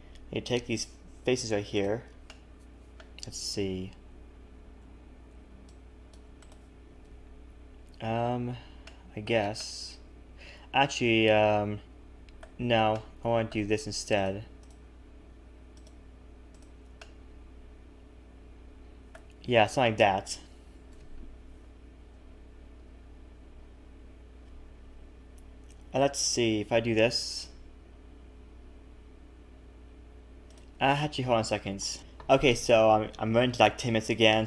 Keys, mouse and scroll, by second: 1.8 click, 2.2 middle click, 4.1 c, 7.0 KP_1, 7.5-8.7 scroll up 1, 8.8 shift+middle click, 9.5 middle click, 12.9 middle click, 14.1 shift+click, 14.6 shift+click, 17.0 middle click, 19.5 KP_1, 20.9 KP_3, 27.6 e, 31.0 ctrl+z.